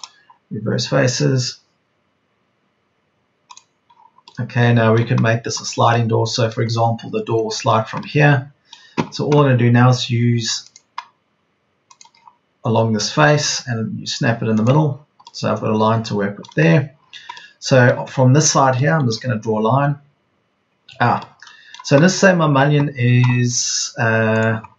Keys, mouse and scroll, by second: 13.2 Escape, 21.0 Escape.